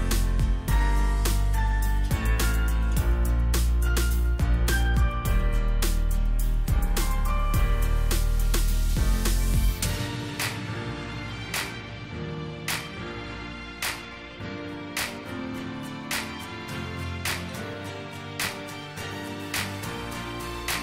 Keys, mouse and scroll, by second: 1.5 shift+click, 2.3 ctrl+g, 7.5 ctrl+g, 9.4-9.9 alt+scroll down 1, 10.6 alt+scroll down 1, 11.5 space.